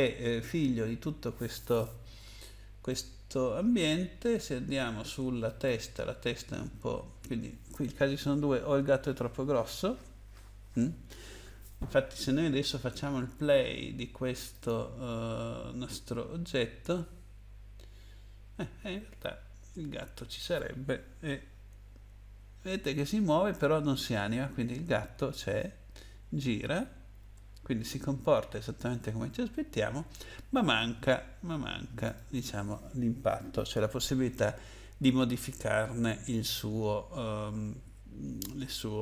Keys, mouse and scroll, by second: 2.9 middle click, 5.4 click, 14.5 click, 19.4-20.7 scroll down 2, 22.1 Down, 22.6 Down, 25.5 Right, 26.0 Right, 31.2 Left, 32.1 click.